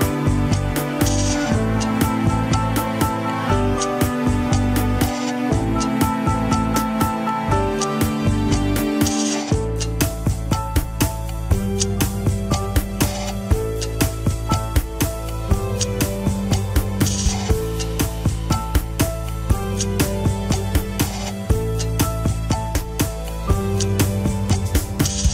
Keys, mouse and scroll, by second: 0.0 click, 0.8 r, 2.1 scroll down 1, 2.4 shift+middle click, 2.6 scroll up 1, 3.2 ctrl+Tab, 3.3 shift+drag, 3.6 ctrl+Tab, 4.2 scroll up 1, 4.5 alt+z, 5.7 ctrl+click, 5.7 alt+z, 5.9 shift+middle click, 6.4 scroll down 1, 6.6 f, 8.3-15.4 drag, 20.9-23.9 drag, 23.9 alt+z, 24.8 ctrl+click.